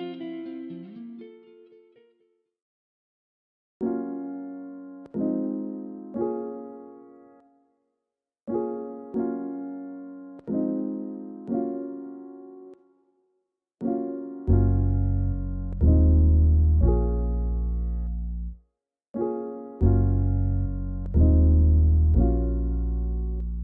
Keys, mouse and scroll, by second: 3.2 scroll down 2, 3.9 scroll up 6, 4.5-5.2 scroll down 10, 5.2-5.7 scroll up 10, 6.1 scroll down 2, 6.2 middle click, 6.5-7.2 scroll up 1, 7.2 middle click, 7.6-7.9 scroll up 3, 7.9 scroll down 1, 8.3 middle click, 8.4-9.0 scroll up 1, 9.0 middle click, 9.1-9.4 scroll up 9, 9.8-10.2 scroll down 9, 10.5 click, 10.8 click, 10.9 shift+middle click, 11.1 scroll up 1, 11.2 Tab, 11.4 middle click, 11.6 1, 11.8 click, 12.2 click, 13.4-14.8 typing, 13.8 scroll up 2, 14.1 scroll down 1, 14.9 alt+click, 15.9-17.1 right drag, 17.1 Tab, 17.1-17.5 drag, 18.8-20.7 drag, 21.2 Tab, 21.5 a, 22.0-22.5 ctrl+a, 23.0 ctrl+a.